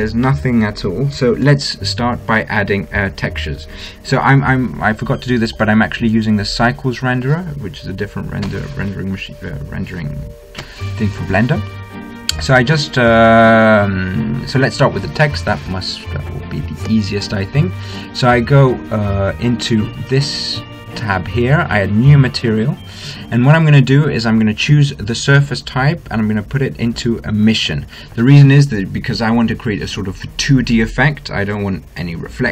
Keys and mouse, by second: 0.0 Escape, 6.0-8.0 drag, 21.1-24.3 drag, 25.8-27.6 drag.